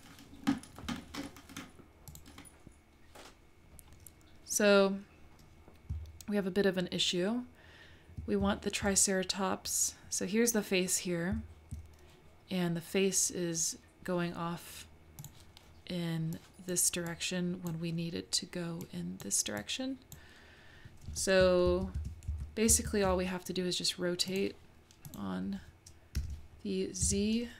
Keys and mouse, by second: 2.1 click, 5.9 `, 8.4 `, 11.3 `, 15.2 click, 16.3 click, 17.1 click, 18.8 click, 19.6 click, 21.7 super+z, 22.0 super+z, 22.3 super+z, 22.7 super+z, 24.4 click, 26.1 r.